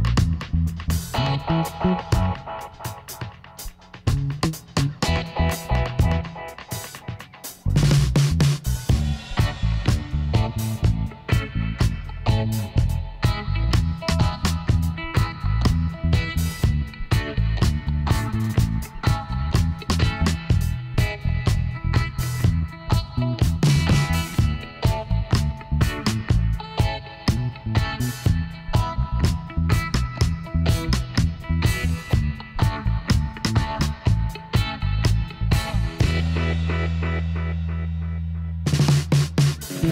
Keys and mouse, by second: 0.2 b, 0.4 right click, 1.1-3.3 middle drag, 1.7 e, 3.3-5.0 drag, 5.0 middle click, 6.7-9.8 middle drag, 8.0 ctrl+r, 9.8-11.6 drag, 11.6-13.8 middle drag, 13.0 b, 14.4-16.1 drag, 17.3-21.4 middle drag, 18.3 b, 20.1 e, 23.6-26.1 drag, 26.1 s, 29.0 ctrl+r, 31.0-32.8 drag, 32.8 ctrl+r, 34.3-36.1 drag, 36.6-38.1 middle drag, 38.1-39.8 drag.